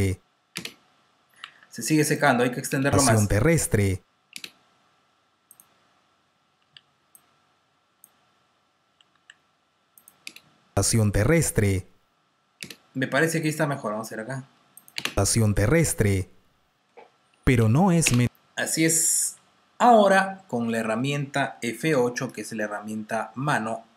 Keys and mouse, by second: 1.0 space, 2.4 click, 2.6 space, 4.3 space, 5.4 click, 5.4-7.1 typing, 7.1 click, 8.6 space, 9.0 r, 9.1 r, 9.9 click, 12.4 space, 14.0 click, 15.0 space, 17.9 space, 21.8 F8.